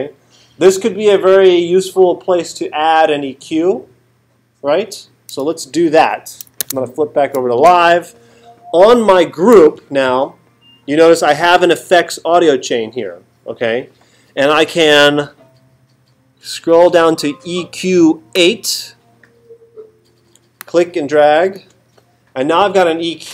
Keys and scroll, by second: 6.6 super+Tab.